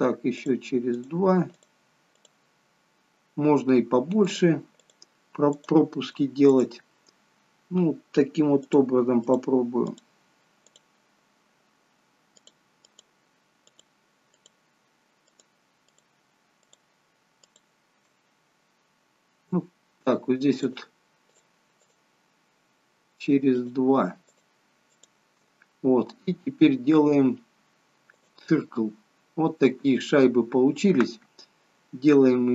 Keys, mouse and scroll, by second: 0.5 shift+click, 0.9 shift+click, 1.5 shift+click, 2.3 shift+click, 4.2 shift+click, 4.7 shift+click, 5.5 shift+click, 6.6 shift+click, 8.7 shift+click, 9.3 shift+click, 9.9 shift+click, 10.8 shift+click, 12.5 shift+click, 12.9 shift+click, 13.8 shift+click, 14.4 shift+click, 15.4 shift+click, 15.9 shift+click, 16.7 shift+click, 17.5 shift+click, 20.6 shift+click, 21.4 shift+click, 21.9 shift+click, 23.4 shift+click, 24.4 shift+click, 25.0 shift+click, 25.8 scroll down 1, 28.2 click.